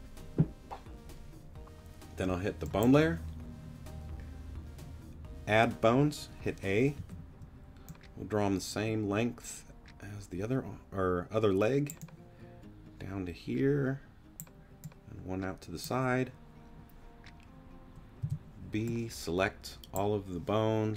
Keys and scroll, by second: 7.0 a, 18.2 b.